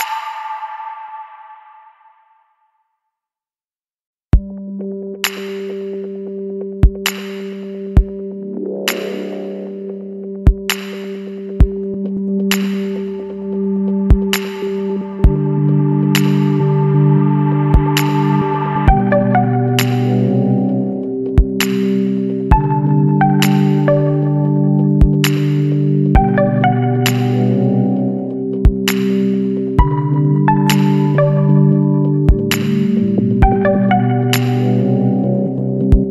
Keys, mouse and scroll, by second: 0.5 click, 2.6 click, 3.2 KP_2, 3.4 KP_4, 4.3 KP_Enter, 7.2 scroll up 2, 7.8 scroll up 2, 9.0 scroll up 1, 9.6 scroll down 1, 11.1 click, 13.8 click, 16.8 click, 19.4 click, 20.7 Escape, 21.5 click, 21.8-23.0 scroll down 3, 23.1-23.4 scroll up 1, 23.8-24.2 scroll down 2, 24.4 scroll up 1, 25.6 click, 28.3 click, 29.9 click, 30.9 click, 32.0 KP_4, 32.6 KP_Enter, 34.5 click, 35.5 KP_5, 36.0 KP_Enter.